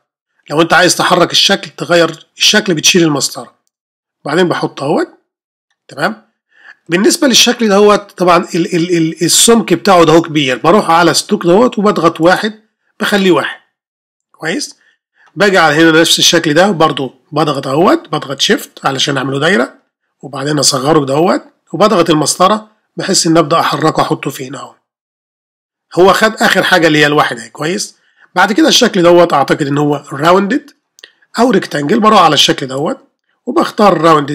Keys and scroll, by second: 22.3 shift+space.